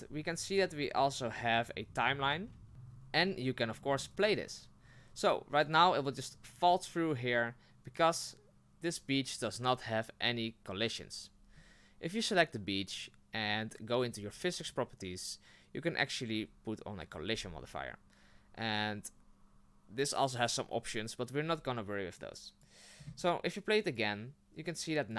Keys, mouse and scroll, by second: 2.4-4.2 middle drag, 4.2-7.8 drag, 7.8 right click, 17.1 click, 22.2-25.1 drag.